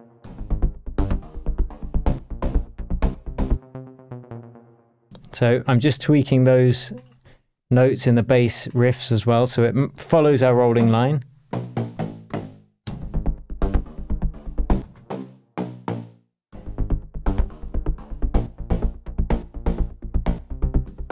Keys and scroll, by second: 0.2 space, 3.5 space, 4.0 Down, 4.9 shift+Down, 5.0 shift+Tab, 7.9 shift+super+j, 11.4 Down, 12.8 space, 14.8 space, 15.5 Down, 16.4 space, 17.6 p, 18.5 Down, 20.8 shift+Tab.